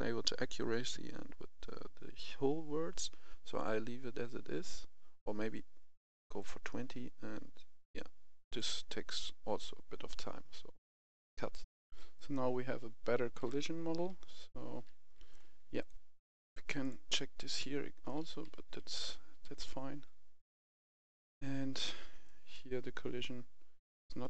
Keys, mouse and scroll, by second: 11.6 typing, 11.6 F10, 12.2-15.3 right drag, 13.0-14.7 typing, 15.6 click, 17.9 right click, 18.1 d, 18.3 d, 18.8 a, 20.2-21.3 drag, 22.1-23.3 right drag, 23.3 s, 23.8 click.